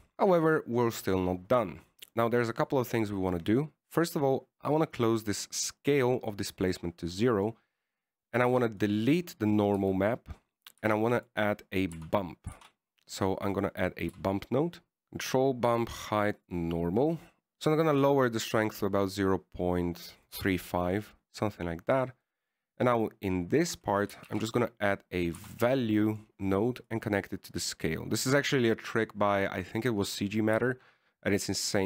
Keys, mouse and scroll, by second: 0.1 middle click, 0.1-0.8 scroll up 3, 0.8 middle click, 1.2-2.7 scroll down 1, 3.1 middle click, 3.9 click, 6.6 click, 8.6 middle click, 9.2 click, 10.1 click, 11.1 x, 12.2 shift+a, 15.0 click, 16.0 click, 19.0 click, 21.9 middle click, 22.9 middle click, 23.5 middle click, 25.6 shift+a, 29.0 click, 31.6 click.